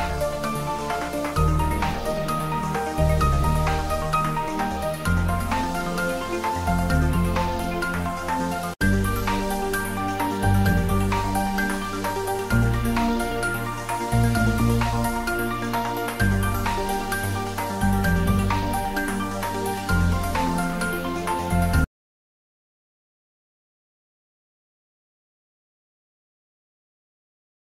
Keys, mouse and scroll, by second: 4.4 ctrl+s, 15.5 ctrl+s, 15.7 ctrl+middle click, 16.1 ctrl+click, 16.4 ctrl+s, 16.8 ctrl+middle click, 17.2 shift+middle click, 17.3 ctrl+s, 19.4 click, 20.4 ctrl+s, 21.2 click.